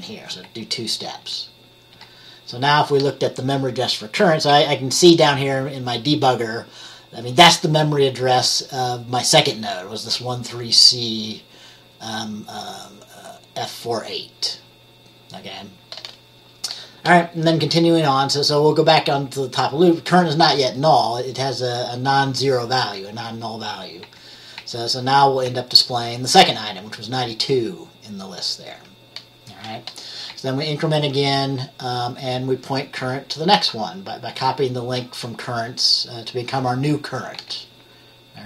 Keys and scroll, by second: 1.3 F10, 2.0 F10, 24.1 F10, 24.7 F10, 25.6 F10, 30.4 F10, 37.4 F10.